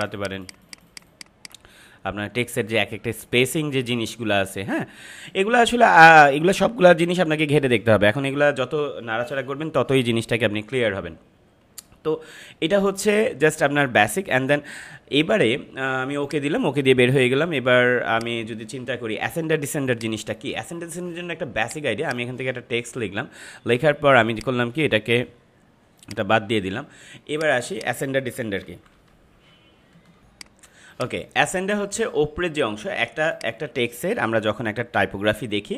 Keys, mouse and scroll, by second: 19.5 space, 19.8 click, 20.4 space, 21.5 click, 28.7 ctrl+=, 30.2 ctrl+m, 30.4 click, 30.6 space, 33.3 click.